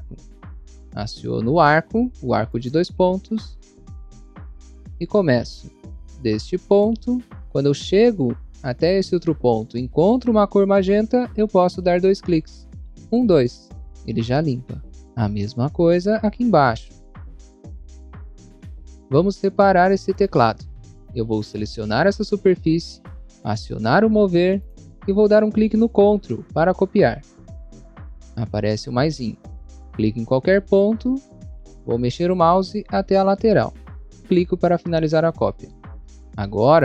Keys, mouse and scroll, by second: 2.3 click, 3.4 scroll up 1, 3.9 scroll up 1, 4.5 scroll up 1, 6.5 click, 12.9 click, 13.0 click, 14.3 scroll down 1, 14.9 scroll down 1, 16.1 scroll up 1, 17.2 click, 17.5 double click, 17.5 scroll down 1, 17.7 scroll up 1, 17.7 click, 18.0 scroll down 1, 18.0 scroll up 1, 18.1 click, 18.3 double click, 18.3 scroll down 1, 19.9 click, 20.4 scroll down 1, 21.2 click, 25.0 click, 30.5 click, 31.3 scroll down 1, 34.0 click, 36.5 click.